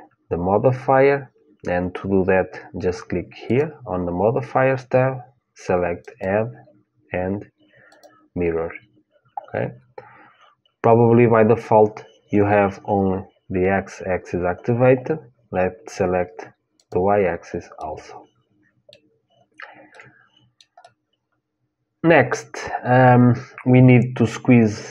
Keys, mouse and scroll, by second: 3.2-5.2 drag, 5.8-7.7 drag, 16.5-18.6 drag, 17.5-22.5 middle drag, 19.5 scroll up 1.